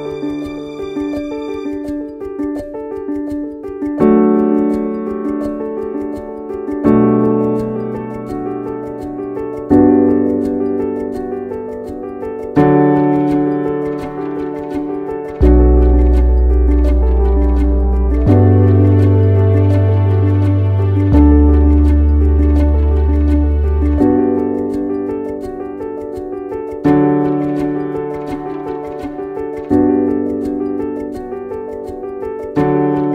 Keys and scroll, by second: 3.8 ctrl+t, 9.9 ctrl+t.